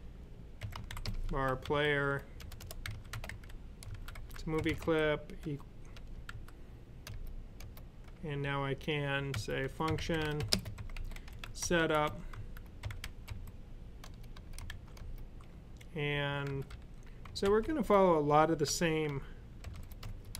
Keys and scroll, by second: 0.3-6.2 typing, 9.2-13.1 typing, 14.5 shift+[, 16.3-20.3 typing.